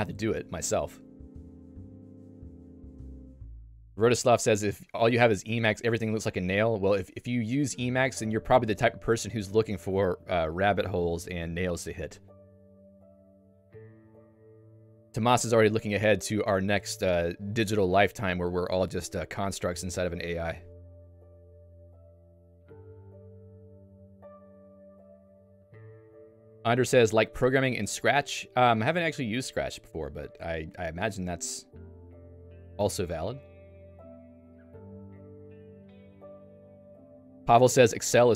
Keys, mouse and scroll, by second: 9.4 Escape, 10.9 click, 11.2 Escape, 36.8 Escape.